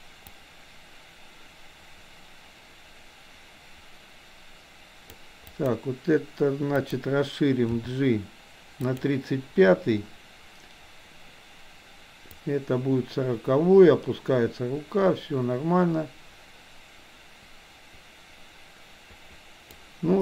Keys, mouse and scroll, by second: 0.4-5.1 drag, 5.5 click, 6.8 click, 7.6 g, 12.4-19.9 drag.